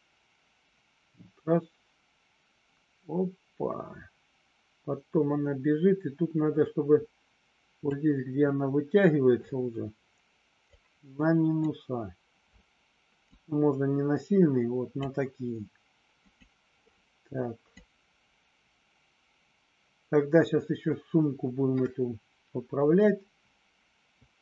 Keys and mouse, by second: 10.7 click, 13.2-15.1 drag, 17.8-24.4 drag.